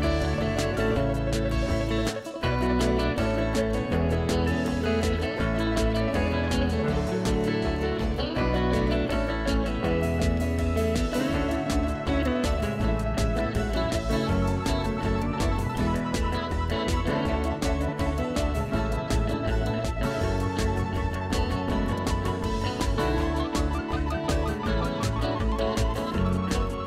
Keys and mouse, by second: 1.6 click, 1.9 ctrl+s, 4.1 click, 16.4 click, 16.5 ctrl+1, 16.5 click, 18.0 a, 18.1 click, 18.4 Escape, 18.5 click, 18.8 click, 19.3-20.8 typing, 20.1 click, 20.5 ctrl+e, 20.6 click, 20.8 click, 21.5 ctrl+1, 21.6 click, 21.9 Delete, 22.1 click, 23.3 e, 23.5 click, 23.7 a, 23.8 click, 25.2 KP_5, 25.3 Return, 25.7 ctrl+1, 25.8 click, 25.9 right click, 26.3 click, 26.7 click.